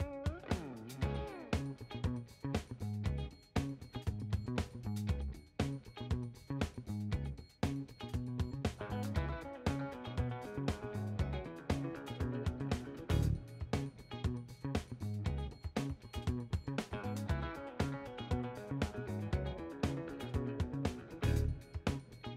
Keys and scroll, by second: 0.0-1.5 typing, 3.9-5.6 typing, 20.4 ctrl+z, 21.5 ctrl+z.